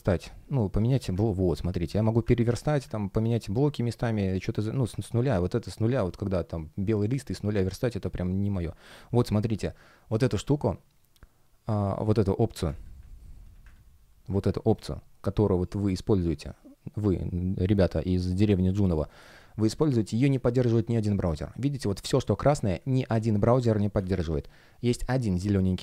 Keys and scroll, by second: 1.0 super+space, 7.7 space, 11.7 space, 19.1 space, 22.4 space, 23.5 super+\, 23.9 space.